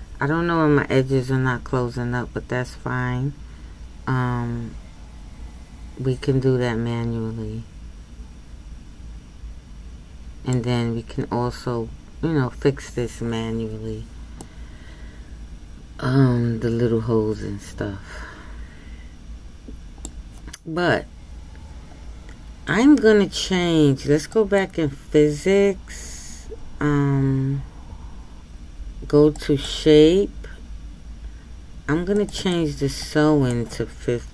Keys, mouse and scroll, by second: 14.5-17.4 middle drag.